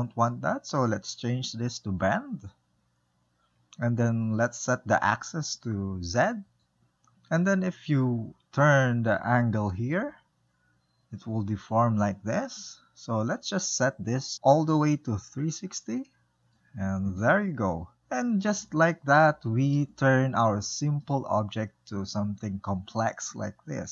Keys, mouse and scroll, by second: 1.7 click, 5.1-7.1 drag, 7.1 ctrl+middle click, 8.1-11.5 drag, 17.9 middle click, 18.9-22.0 shift+middle drag, 22.0-22.5 scroll up 1, 22.5-23.9 middle drag.